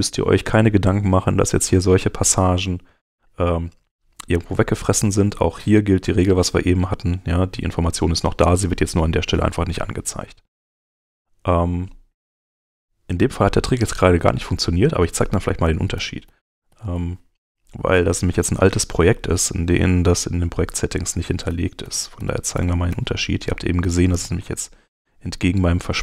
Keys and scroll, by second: 15.9 super+z, 21.5 super+z.